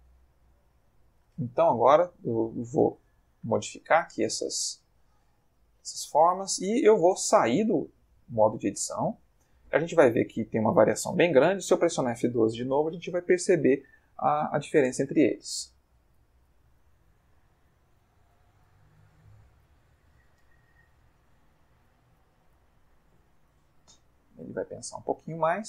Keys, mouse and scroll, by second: 3.2 click, 3.9 click, 4.8 click, 5.7 click, 8.0 click, 8.5 click, 11.5 F12.